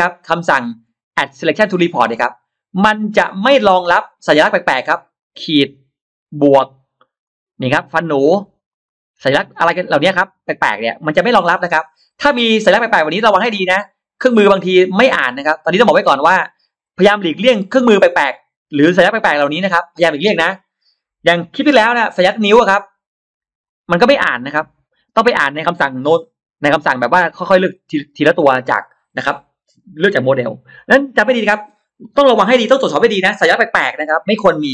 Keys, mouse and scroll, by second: 0.0 ctrl+alt+shift+x, 0.0 ctrl+alt+shift+middle click, 1.8 click, 4.3 click, 5.6 click, 6.0 click, 7.1 click, 7.5 click, 8.1 click, 8.5 click, 9.4 click, 10.5 click, 11.4-12.7 drag, 12.9 click, 13.5 click, 14.1-18.5 drag, 18.9 click, 19.4 click, 22.7 click, 23.5 click, 24.0 click, 25.0-26.8 drag.